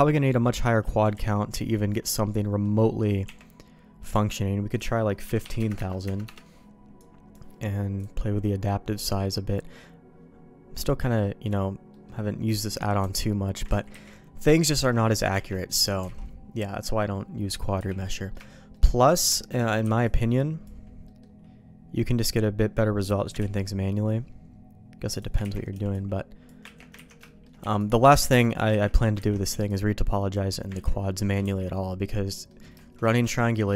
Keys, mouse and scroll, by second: 1.1 ctrl+z, 1.5 ctrl+z, 2.2 middle click, 3.2 Tab, 4.1 Tab, 5.0-6.6 drag, 5.7 KP_0, 7.0 click, 8.1-10.6 drag, 11.2 middle click, 11.9 middle click, 13.0 Tab, 13.7 ctrl+z, 13.9 ctrl+z, 14.7 ctrl+z, 15.1 middle click, 15.3 Tab, 15.7 middle click, 16.1 alt+a, 17.5 middle click, 17.8 n, 18.2 middle click, 18.5 shift+middle click, 18.9 middle click, 19.3 shift+middle click, 19.8 b, 21.0 middle click, 22.5 middle click, 23.4 ctrl+q, 25.1 click, 25.4 ctrl+x, 25.7 b, 26.8 ctrl+q, 26.9 ctrl+x, 27.2 shift+middle click, 27.6 b, 28.7 ctrl+q, 29.3 ctrl+x, 29.5 b, 30.7 ctrl+q, 31.4 ctrl+x, 32.5 middle click, 33.0 middle click, 33.3 shift+middle click.